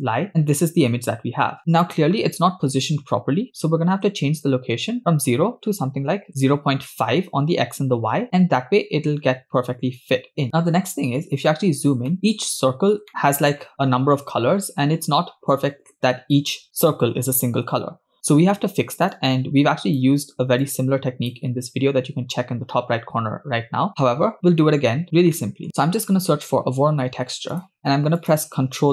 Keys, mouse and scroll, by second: 4.5-6.3 shift+drag, 10.9-11.5 scroll up 5, 12.1 shift+middle click, 12.5 scroll up 2, 13.2 shift+middle click, 18.1-19.1 scroll down 4, 19.1-20.0 drag, 20.6 click, 24.0 scroll down 3, 24.6 middle click, 25.1 scroll down 1, 25.3 middle click, 27.7 middle click, 27.7-28.2 scroll up 3, 28.2 click.